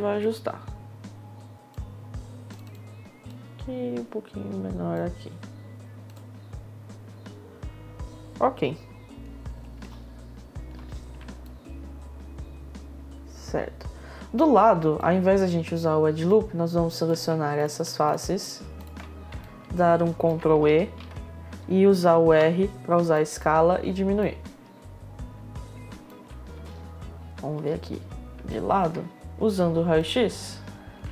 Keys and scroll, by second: 9.4 w, 9.6 space, 14.5 space, 21.8 r, 23.0 r, 26.1 space.